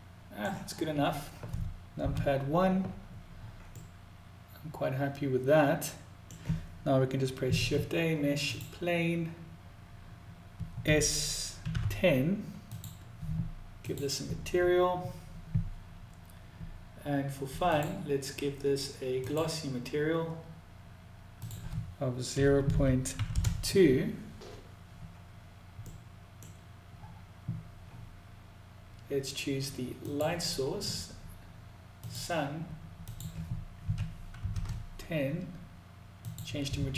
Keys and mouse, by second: 3.1-5.7 middle drag, 10.2 s, 13.2 click, 17.1-18.8 drag, 20.9-23.8 drag, 25.3 middle click, 29.3 click, 31.4 click, 32.4-34.8 drag, 35.5 click.